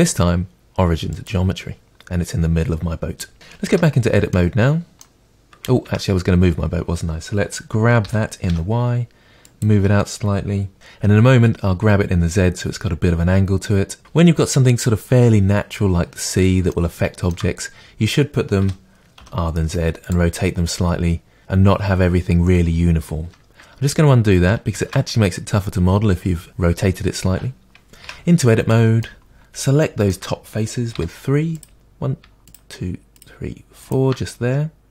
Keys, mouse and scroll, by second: 3.7 Tab, 4.3-8.0 middle drag, 5.8 Tab, 8.0 g, 9.5 middle click, 9.6-10.7 drag, 16.7-20.1 shift+middle drag, 18.6 r, 20.1-23.3 drag, 24.7 ctrl+z, 28.1 Tab, 28.7 middle click, 29.2 middle click, 29.2 scroll up 2, 30.9 middle click, 30.9 3, 31.5 click, 32.5 shift+click, 33.1 shift+click, 34.3 middle click.